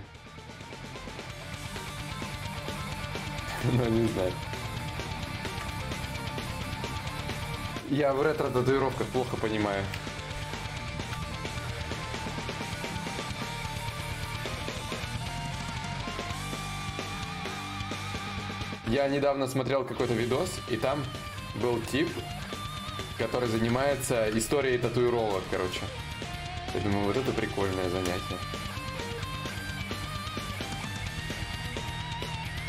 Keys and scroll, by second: 3.0 shift+d, 5.7 d, 6.2 d, 6.6 d, 11.5 x, 13.7 ctrl+z.